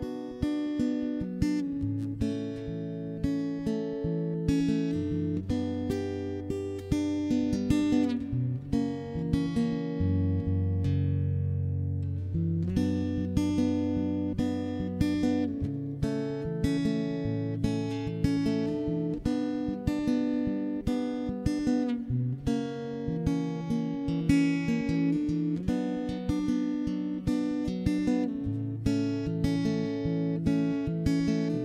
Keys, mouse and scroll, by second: 0.4 a, 0.6 middle click, 0.9 Tab, 1.1 right click, 1.4 middle click, 1.5 Tab, 1.7 a, 1.9 a, 2.3 ctrl+,, 2.5 middle click, 2.8 s, 3.7 middle click, 4.2 ctrl+KP_3, 4.7 middle click, 4.9 z, 5.0 middle click, 5.6 Tab, 5.8 right click, 6.0 ctrl+3, 6.2 Tab, 6.3 Tab, 6.6 middle click, 7.0 middle click, 7.2 click, 7.2 d, 7.4 right click, 7.7 middle click, 8.1 click, 8.1 right click, 8.1 d, 8.4 middle click, 9.6 middle click, 10.0 ctrl+KP_3, 10.4 click, 10.4 d, 11.2 middle click, 11.9 middle click, 12.4 right click, 12.7 Tab, 13.5 a, 14.2 e, 15.2 s, 15.6 click, 16.5 ctrl+KP_Enter, 16.8 ctrl+KP_3, 17.3 s, 19.2 middle click, 19.9 z, 20.3 ctrl+KP_3, 20.4 middle click, 21.2 ctrl+Tab, 21.4 middle click, 21.8 x, 22.0 middle click, 22.1 ctrl+Tab, 22.5 a, 22.5 middle click, 23.2 middle click, 24.0 middle click, 24.4 ctrl+s, 25.2 middle click, 26.0 middle click, 27.0 middle click, 28.6 right click, 28.8 ctrl+Tab, 29.2 right click, 29.4 ctrl+z, 29.5 ctrl+z, 29.6 ctrl+z, 29.8 ctrl+KP_3, 30.0 middle click, 30.4 ctrl+Tab, 30.5 middle click, 30.8 c.